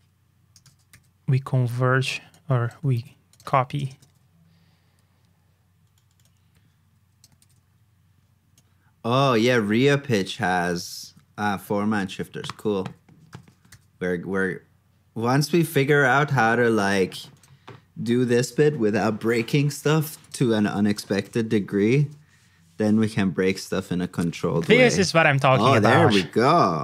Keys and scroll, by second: 2.9 super+c, 4.0 super+v, 7.3 super+c, 10.1 super+v, 11.9 alt+BackSpace, 17.1 super+c, 18.4 super+v, 21.2 super+v.